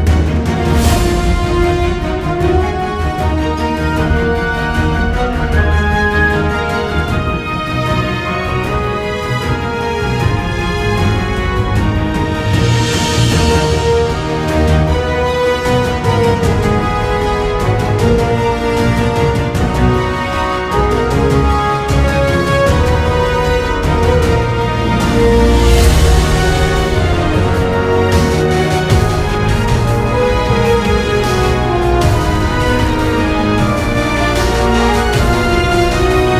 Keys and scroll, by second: 1.2 super+z, 10.8 super+=, 11.4 space, 13.0 super+z, 13.7 super+z, 17.8 super+=, 18.0 space, 22.4 super+-, 22.5 `, 22.7 super+=, 22.8 space, 35.5 super+=, 35.7 space.